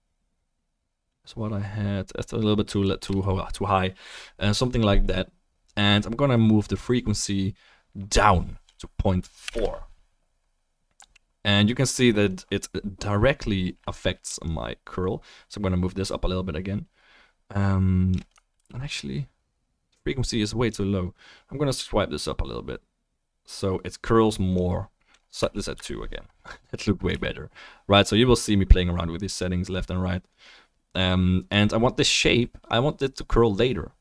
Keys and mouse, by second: 18.7 ctrl+z, 29.0-34.0 shift+middle drag.